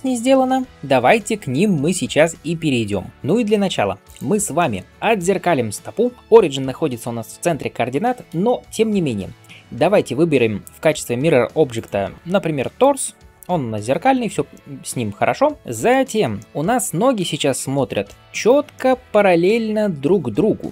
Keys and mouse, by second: 2.9 click, 2.9-3.9 middle drag, 2.9-8.1 right drag, 3.9 click, 6.2-8.1 drag, 6.2-8.1 middle drag, 8.6-13.4 drag, 8.6-13.4 middle drag, 8.6-13.4 right drag, 13.8-14.2 right drag, 14.8-20.7 right drag, 15.6 ctrl+space.